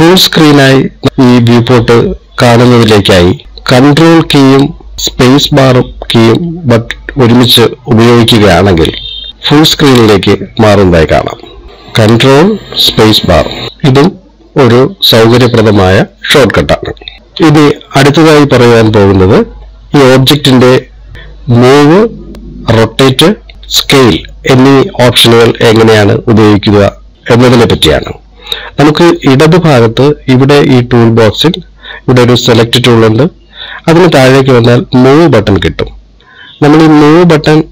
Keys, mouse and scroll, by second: 11.7 n, 13.7 ctrl+space, 25.9 middle click.